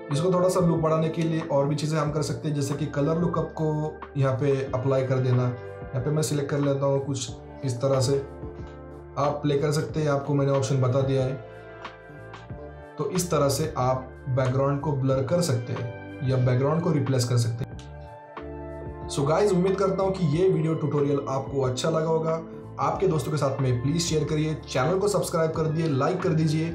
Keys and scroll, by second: 7.9 Down, 8.5 Down, 9.0 Down, 10.1 Down, 10.8 Down, 11.6 Down, 12.2 Down, 13.0 Down.